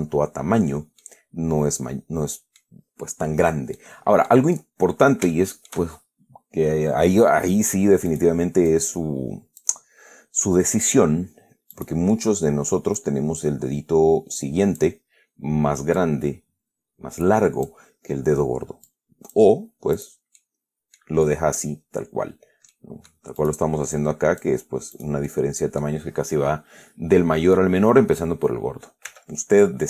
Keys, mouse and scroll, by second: 1.3 middle click, 1.4 scroll down 1, 4.1 middle click, 5.6 shift+middle click, 8.4 right click, 9.0-10.1 drag, 10.4 scroll up 1, 12.0 right click, 13.3-15.3 drag, 16.3-18.2 drag, 19.2 click, 20.3 right click, 20.7 middle click, 21.5 middle click, 23.0 middle click, 23.7 right click, 24.2 click, 25.2 right click, 25.6 middle click, 25.6 scroll down 1, 29.4 e.